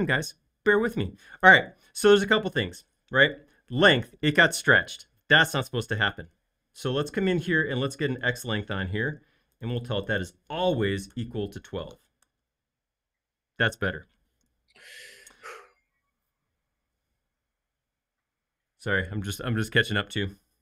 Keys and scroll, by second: 11.1-12.1 typing, 12.2 Return.